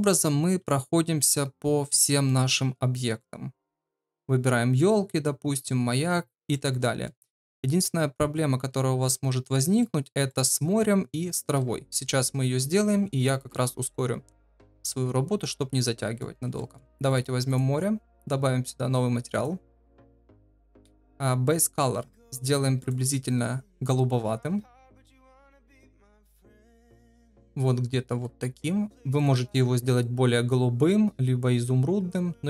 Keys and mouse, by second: 3.2-3.7 middle drag, 6.5-7.0 middle drag, 9.5 middle click, 10.2 click, 14.5-16.2 middle drag, 16.5 shift+middle drag, 17.4 click, 19.6 click, 27.0 click, 28.1 ctrl+v.